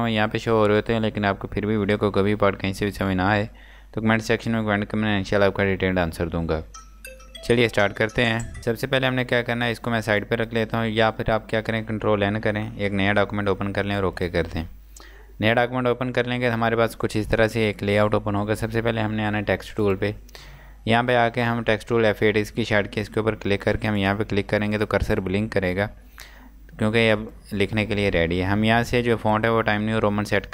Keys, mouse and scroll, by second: 8.6-9.2 scroll down 1, 9.2 click, 12.3 n, 13.9 click, 20.5 click, 23.9 click, 27.3 click.